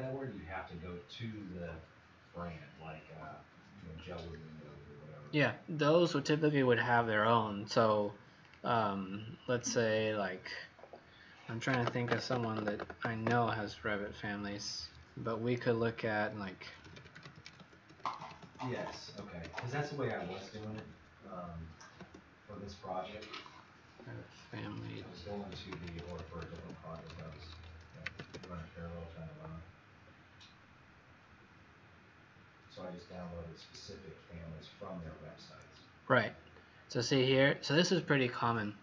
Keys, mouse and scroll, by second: 8.4 click, 16.4-21.2 typing, 25.2-28.6 typing, 33.6 click.